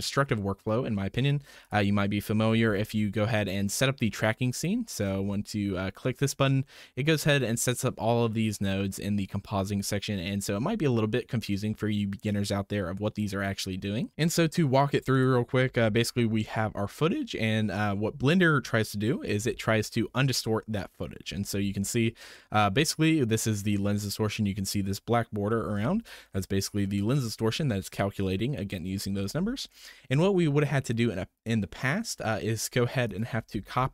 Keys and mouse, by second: 1.0 middle click, 1.6 click, 2.6 m, 4.6 click, 7.6 click, 15.1 click, 15.7 m, 19.4 m, 24.4 middle click, 25.6 alt+v, 25.9 alt+v, 29.8 shift+drag, 33.1 click, 33.6 ctrl+c.